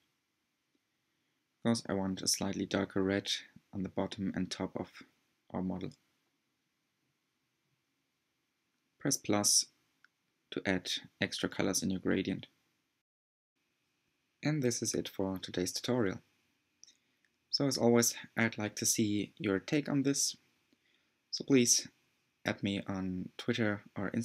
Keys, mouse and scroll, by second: 0.6 click, 3.2 click, 3.4-4.0 drag, 5.2 click, 5.4 click, 6.7-9.4 drag, 9.5-10.2 drag, 10.2-16.5 middle drag, 16.5-17.0 scroll up 2, 17.3-20.7 middle drag.